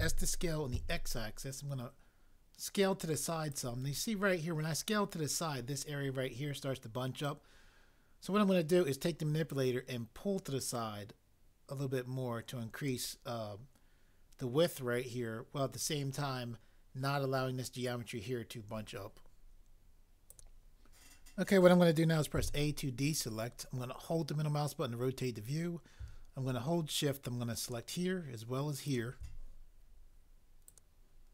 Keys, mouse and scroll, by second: 0.0 s, 0.7 x, 22.3 a.